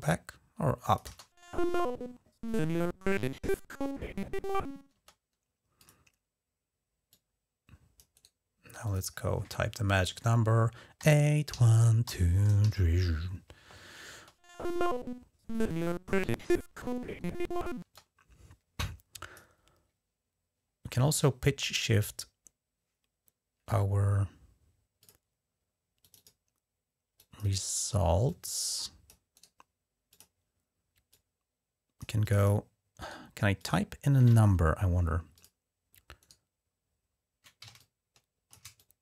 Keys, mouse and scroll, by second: 0.8 space, 4.7 space, 5.6 click, 6.9 click, 7.9 right click, 8.6 click, 10.8-12.4 typing, 13.4 Return, 13.9 space, 17.6 space, 17.7 click, 24.8 click, 25.8 click, 27.0 click, 28.1 click, 29.1 right click, 29.9 click, 30.9-31.8 drag, 32.0 click, 32.8 right click, 33.4 drag, 34.0 Tab, 34.1 Escape, 35.1 click, 36.0 right click, 37.6-39.0 ctrl+drag.